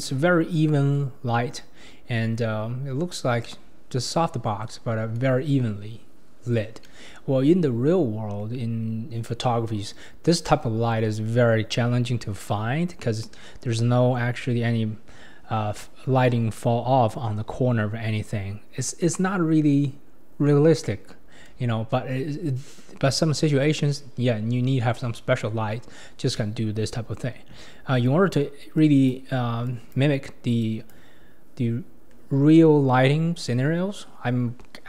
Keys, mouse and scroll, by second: 14.4-15.3 scroll up 3, 22.1-25.1 scroll down 1, 28.1 click, 28.8 click, 29.7 click, 30.6-33.6 drag.